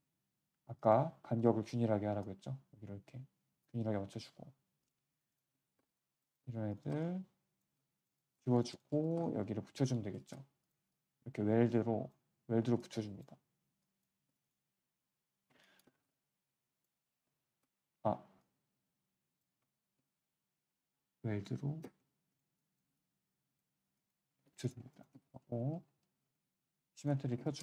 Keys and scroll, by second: 4.1 q, 9.9 q, 14.2 q, 15.0 w, 18.3 w, 24.3 q, 26.2 w.